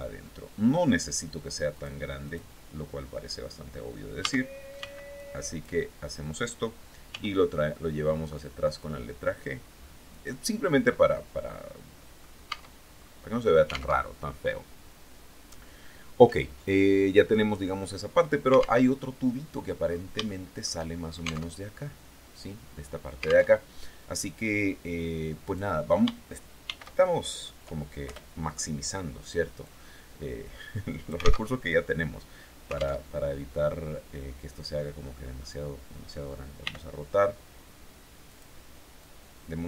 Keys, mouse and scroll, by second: 1.2 click, 1.7 click, 3.6 a, 4.2 b, 4.6 click, 6.5 g, 9.5 click, 10.1-11.8 drag, 11.9 Tab, 12.4 scroll up 1, 13.4 alt+Tab, 18.3 alt+Tab, 19.3 scroll down 2, 19.7 shift+middle click, 20.9 alt+Tab, 22.9 alt+Tab, 24.9 right click, 26.1 shift+d, 27.5 Return, 29.1-30.9 drag, 30.9 alt+Tab, 32.4 alt+Tab, 34.5-35.0 scroll up 2, 36.1 r, 37.7 click, 38.4-39.6 drag.